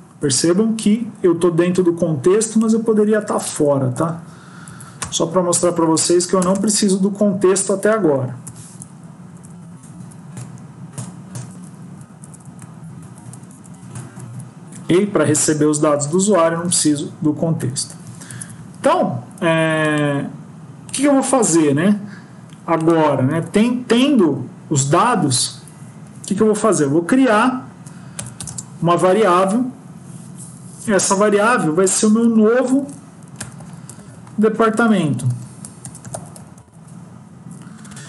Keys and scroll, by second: 3.2 ctrl+x, 3.4 Up, 3.5 Up, 3.8 Up, 4.5 End, 5.6 ctrl+v, 7.0 Up, 8.3 shift+Home, 8.9 shift+Up, 9.8 shift+Tab, 11.7 Down, 12.1 Up, 12.3 Up, 12.9 Down, 13.2 shift+Up, 13.8 Tab, 14.0 Tab, 14.1 Tab, 15.3 End, 16.4 Down, 16.6 Down, 18.2 ctrl+s, 23.3 Tab, 34.5 BackSpace.